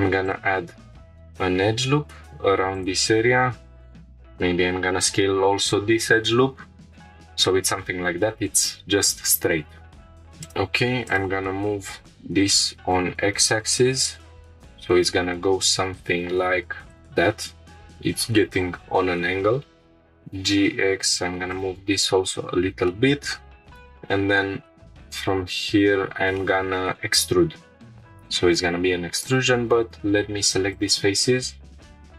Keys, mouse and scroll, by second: 2.7-3.8 drag, 3.8 s, 4.0 z, 4.8 shift+0, 6.9 Return, 7.8-8.2 scroll down 2, 10.1-10.4 scroll up 2, 10.4-11.6 drag, 12.2 g, 12.6 x, 16.9-20.2 drag, 20.2 g, 20.5 x, 21.5-22.7 drag, 22.9-23.3 shift+middle drag, 25.8 scroll up 2, 26.4-26.9 shift+middle drag, 28.6 3, 29.1 click, 29.5 scroll down 1, 30.7 ctrl+click, 31.8-32.1 drag.